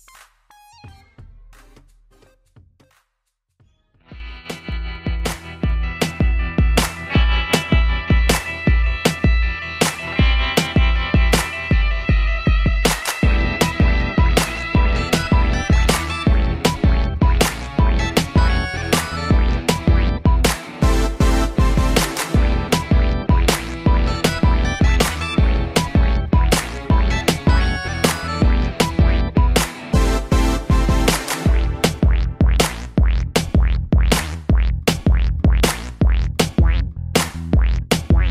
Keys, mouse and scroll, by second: 0.7 Escape, 1.1 middle click, 2.8 i, 3.5 scroll down 2, 3.8 middle click, 4.5 scroll up 2, 5.5 click, 6.1 middle click, 6.6 scroll up 1, 7.0 middle click, 10.4 click, 10.5 click, 11.6 c, 12.2 click, 13.2 Escape, 14.0 i, 14.4 scroll down 2, 14.7 middle click, 16.3 click, 16.4 click, 17.1-17.6 scroll down 3, 17.6 shift+middle click, 17.9-18.2 scroll up 3, 18.3 middle click, 18.9-19.3 scroll up 3, 19.6 middle click, 20.5 shift+click, 21.7 c, 22.1 scroll up 1, 22.5 click, 23.6 Escape, 24.6 shift+click, 25.1 shift+double click, 26.0 b, 26.1 middle click, 27.0 scroll down 2, 29.0 click, 29.1 click, 29.8 click, 34.5 d, 36.7 click, 37.7 click.